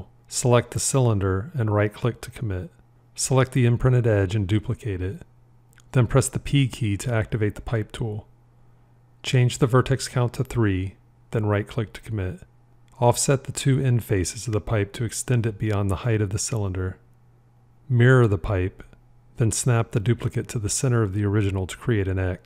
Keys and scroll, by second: 3.9 shift+d, 6.4 p, 18.7 alt+x, 20.9 g.